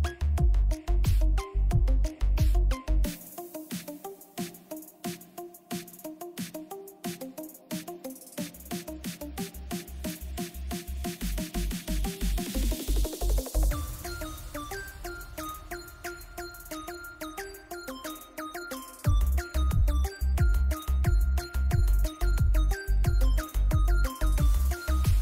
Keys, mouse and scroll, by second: 0.1-6.2 drag, 6.2 z, 6.8 right click, 7.3 click, 8.8 click, 11.6-14.8 drag, 14.8-17.6 drag, 17.7 z, 18.0 right click, 19.0-20.1 drag, 22.7 right click, 23.2-24.8 drag, 24.8 b.